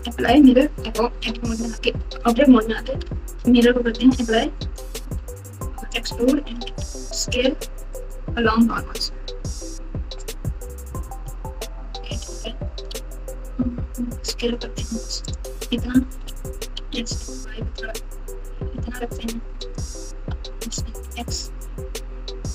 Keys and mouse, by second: 1.1 Tab, 2.8 ctrl+a, 3.8 Tab, 5.6 e, 6.6 s, 10.6-12.8 typing, 16.1 s, 20.1 s.